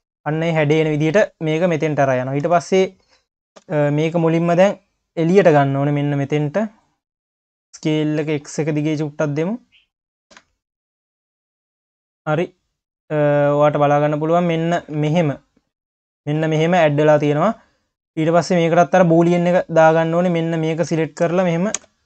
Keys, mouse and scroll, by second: 0.3 scroll up 1, 4.1-5.1 scroll down 4, 5.1 click, 7.0-7.3 scroll up 2, 7.3 s, 8.9 click, 10.3 KP_3, 12.0 click, 12.4 scroll up 3, 14.7 q, 15.1 ctrl+s, 15.5 click, 15.9 ctrl+s, 16.0 scroll up 3, 16.2 q, 16.8 click, 17.1-17.6 scroll up 2, 19.6 click, 20.1 click, 21.0 shift+click, 21.8 ctrl+KP_Add.